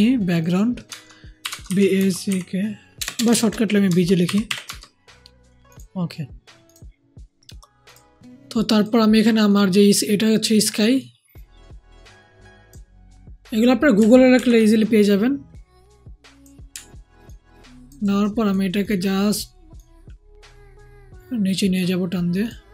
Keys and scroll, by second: 1.3-4.6 typing, 14.3 ctrl+t.